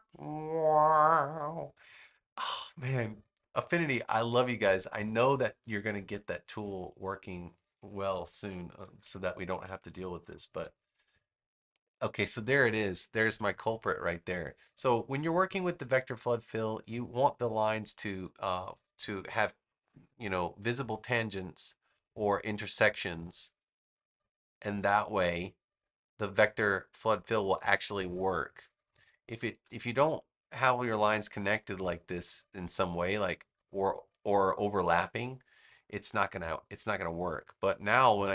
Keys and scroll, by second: 4.1 a, 8.7 super+=, 9.5 space, 18.1 space, 27.7 space.